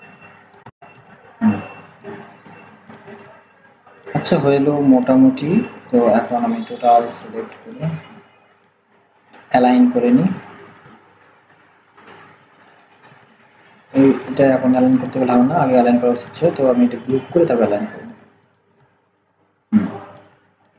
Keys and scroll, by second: 13.1 ctrl+z.